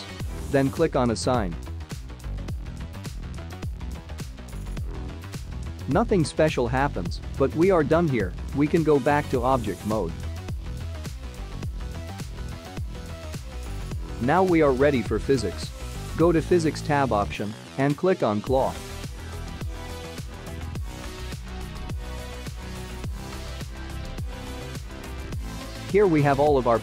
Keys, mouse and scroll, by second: 5.9 click, 10.1 click, 11.1 Tab, 12.9 click, 13.6 click, 14.1-15.1 scroll down 3, 18.3 click, 19.8 click, 25.3 click.